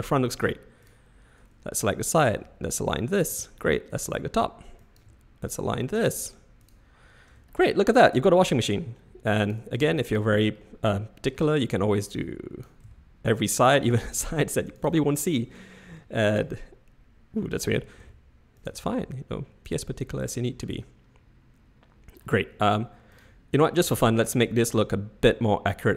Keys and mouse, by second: 2.2 click, 2.3 g, 3.9 click, 4.9 click, 5.0 g, 5.9 click, 6.0 g, 7.2 Tab, 7.4-8.8 middle drag, 9.7 Tab, 10.1 click, 10.7 middle click, 12.1-12.7 drag, 12.9 s, 14.2 g, 15.4 click, 17.7 a, 18.0 s, 18.7 g, 20.3-22.2 middle drag, 23.1 click, 24.3-25.9 shift+middle drag.